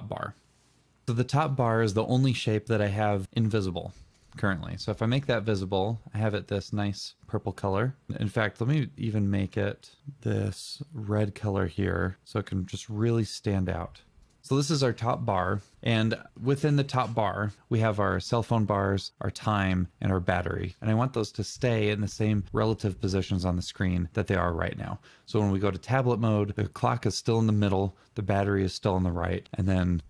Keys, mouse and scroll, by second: 7.1 double click.